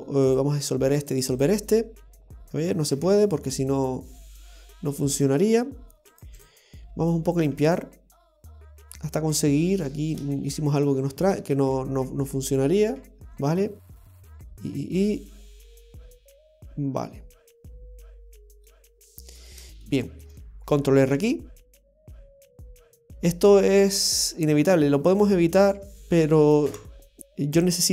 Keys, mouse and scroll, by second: 1.0 right click, 1.2 x, 2.9 ctrl+z, 5.4 scroll up 2, 6.1 right click, 6.3 x, 7.4 right click, 7.5 x, 11.0 ctrl+z, 11.1 ctrl+z, 11.4 ctrl+z, 11.6 ctrl+z, 11.9 ctrl+z, 12.1 ctrl+z, 12.4 ctrl+z, 12.7 ctrl+z, 18.7 middle click, 19.8 shift+middle click, 21.1 ctrl+r, 22.7 middle click, 24.0 click, 25.1 right click, 25.5 shift+right click, 26.6 i.